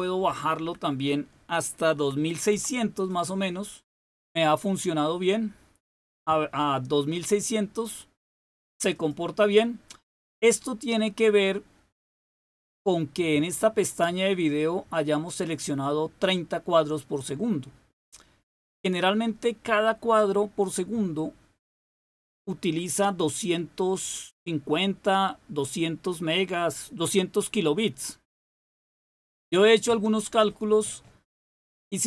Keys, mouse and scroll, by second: 0.1 Delete, 0.5 Delete, 1.9-3.0 typing, 8.9 click, 13.3 click.